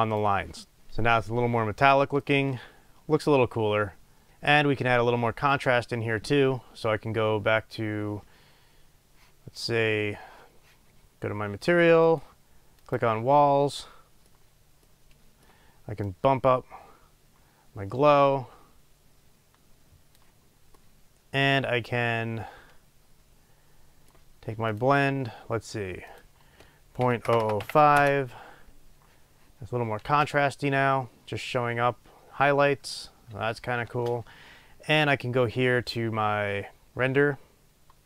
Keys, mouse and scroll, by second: 4.3 space, 16.3-25.1 drag, 28.1-38.0 drag, 28.1 KP_0, 28.2 Return, 30.1 space, 34.0 space.